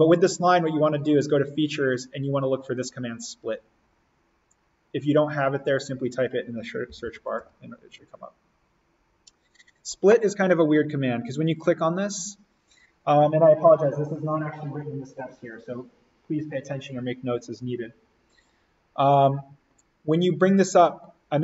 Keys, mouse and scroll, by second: 0.8 click, 5.3 click, 6.6-7.8 typing, 9.2 click.